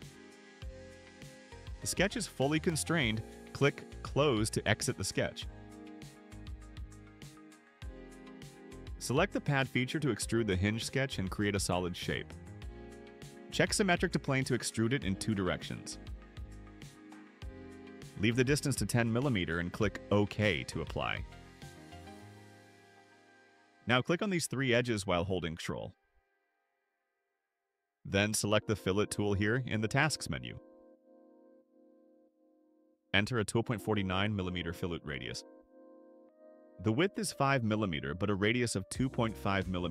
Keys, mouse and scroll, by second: 5.1 click, 7.0-8.1 drag, 8.6 scroll up 2, 11.9 click, 14.2 click, 21.4 click, 24.5 click, 25.5 ctrl+click, 26.4 ctrl+click, 30.8 click, 33.0-34.8 typing, 35.7 middle click, 35.9 middle click, 36.7 click, 37.6 middle click.